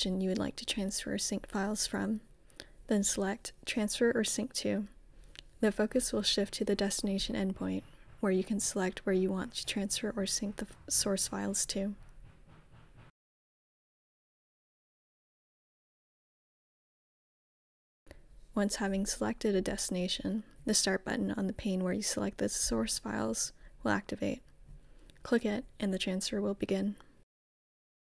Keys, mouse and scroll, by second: 0.2 click, 1.2 click, 2.9-5.6 typing, 8.4 Return, 11.5-14.0 scroll down 1, 14.0 click, 19.4 typing, 21.5-23.6 drag, 23.3-26.5 typing.